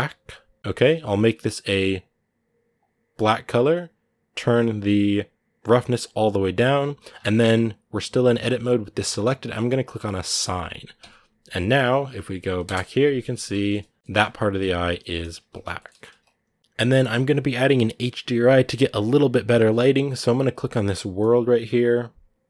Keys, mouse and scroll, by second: 0.6 BackSpace, 5.8-7.8 drag, 7.8-10.3 middle drag, 10.3 click, 10.8 Tab, 13.3 scroll down 1, 13.3 shift+middle click, 14.0-14.5 scroll up 2, 15.5 shift+middle click, 15.9 ctrl+s, 16.6-21.0 right drag, 21.0-22.4 drag.